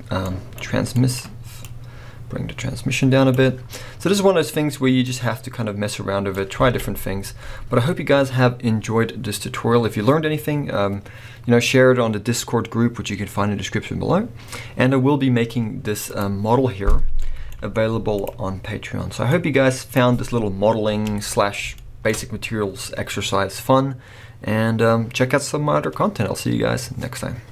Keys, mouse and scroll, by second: 1.7-3.8 drag, 3.8-5.2 middle drag, 5.2-16.2 drag, 6.7 alt+a, 7.1-8.5 scroll down 1, 21.1 alt+a, 21.8-27.5 shift+middle drag.